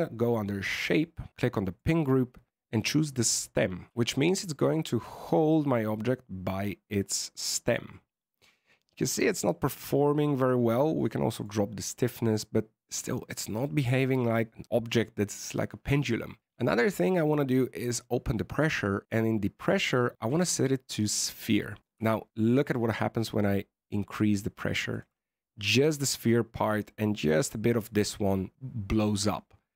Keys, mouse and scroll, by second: 0.7 click, 1.1-1.7 scroll down 7, 1.5 click, 3.9 alt+a, 10.9 click, 14.1-14.8 scroll down 4, 17.9 click, 19.6 click, 21.8 click, 25.2-26.5 scroll up 1, 26.6 scroll up 2.